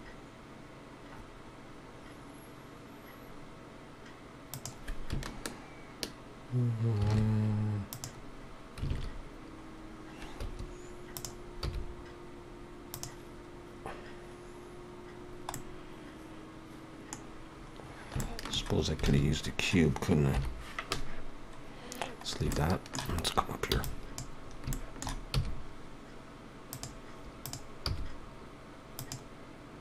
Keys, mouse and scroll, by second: 11.1 click, 11.6 click, 12.9 g, 15.1-15.5 scroll down 2, 15.5 middle click, 17.3-17.6 scroll down 1, 18.2 scroll down 2, 18.2 shift+middle click, 19.1 alt+a, 19.5-20.3 scroll down 1, 22.7 shift+KP_7, 24.7 scroll up 2, 27.4 click, 27.4 s, 27.4 e.